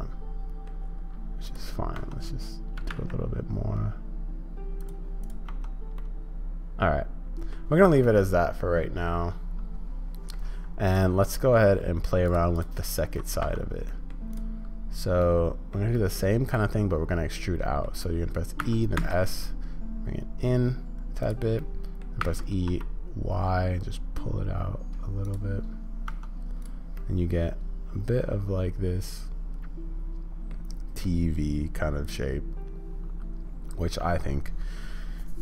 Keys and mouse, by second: 1.4 click, 2.0 Tab, 2.7 g, 5.2 click, 5.5 Tab, 6.0-7.5 middle drag, 8.0-10.3 middle drag, 10.9 click, 11.3 middle drag, 12.5 click, 13.1 middle click, 13.4 Tab, 13.9 middle click, 14.3 click, 15.2 middle click, 15.9 middle click, 16.6-17.8 middle drag, 18.6 e, 21.6 middle click, 26.1 Tab, 26.6 click, 26.9-30.5 middle drag, 31.0-34.2 middle drag.